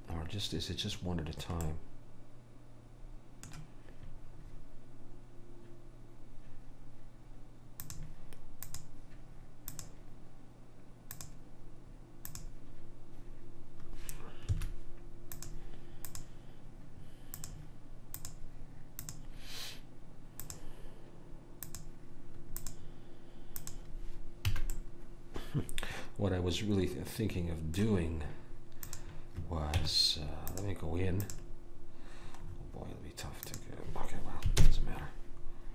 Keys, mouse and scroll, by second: 1.8 middle click, 7.9-11.7 drag, 15.5 click, 21.7 click, 23.8 click, 24.7 a, 24.9 right click, 25.6 middle click, 28.9 click, 29.9 Tab, 33.1 middle click, 33.6 click, 34.7 ctrl+l.